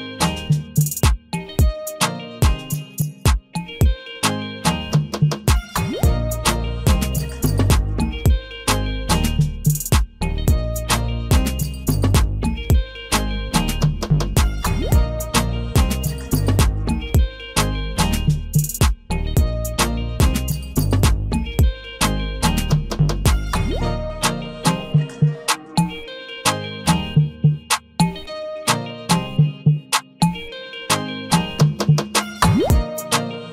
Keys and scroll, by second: 3.8 ctrl+g.